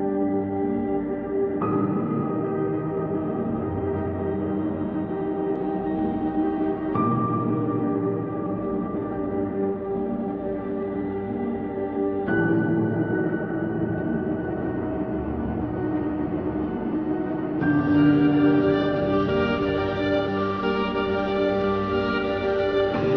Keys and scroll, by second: 1.2 space, 2.0 space, 4.9 Delete, 6.2 ctrl+alt+g, 11.8 ctrl+Delete, 12.2 ctrl+KP_Add, 12.3 space, 15.1 ctrl+Delete, 16.4 space, 17.1 space, 18.5 ctrl+z, 19.6 space, 20.2 space, 21.3 space.